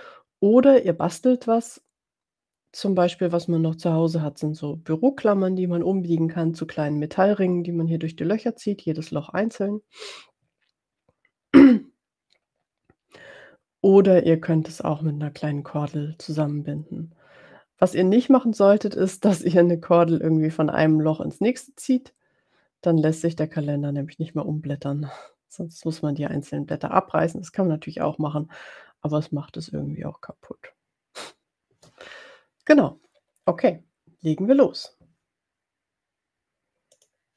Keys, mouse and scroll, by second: 36.9 click.